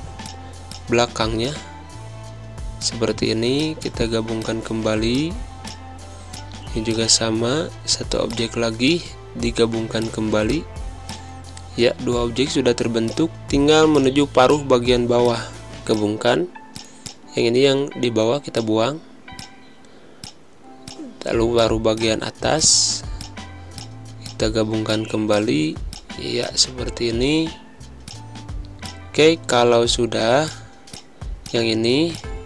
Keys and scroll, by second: 1.1 space, 3.6 space, 6.1 space, 10.3 space, 11.2 space, 15.0 z, 17.3 Delete, 18.6 space, 21.2 space, 23.5 space, 26.3-29.5 typing, 32.1 space.